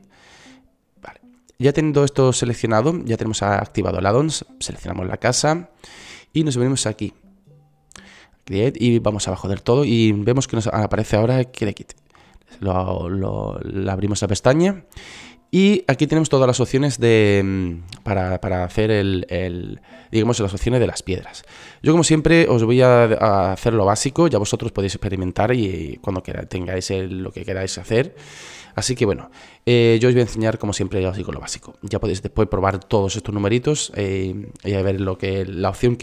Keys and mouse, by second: 9.9-11.8 middle drag, 12.6-16.1 middle drag, 34.8-36.0 drag.